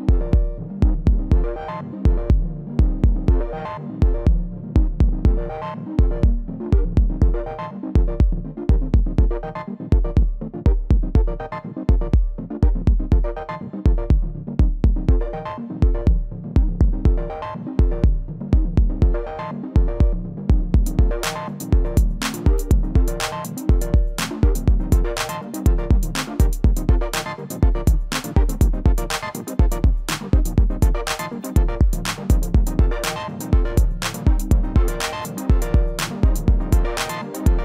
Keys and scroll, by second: 16.8 z, 18.7 ctrl+a, 25.5 m.